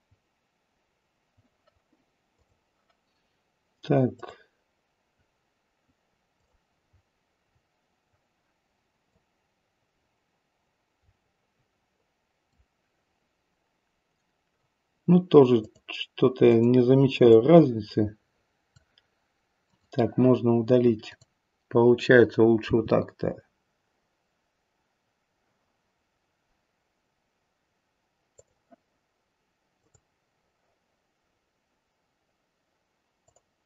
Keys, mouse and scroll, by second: 2.3 click, 4.1 click, 6.4 click, 6.8-7.4 scroll down 1, 7.4-9.1 scroll down 2, 9.1 click, 9.1 scroll down 1, 15.5 click, 16.5 click, 17.2 click, 19.6 click, 21.0 click, 22.6 g, 29.7 click, 33.2 click.